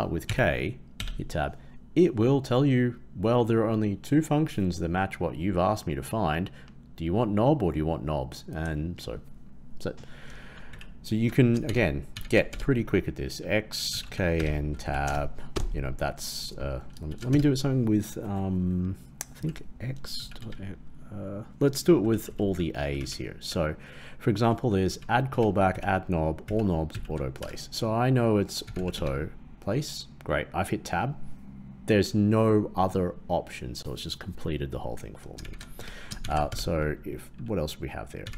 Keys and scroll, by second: 10.6 shift+Right, 11.6 shift+Left, 12.1 shift+Left, 35.4 shift+Left, 36.1 shift+Left.